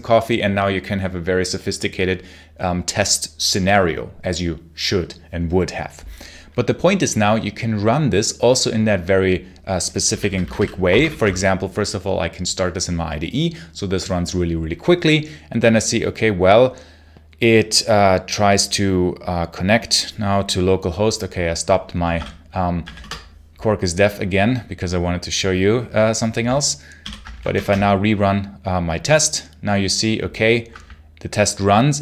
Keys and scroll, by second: 9.9 j, 10.8 ctrl+shift+F10, 21.9 Escape, 22.0 k, 22.7 a, 22.9 Return, 26.9 l, 27.4 shift+F10.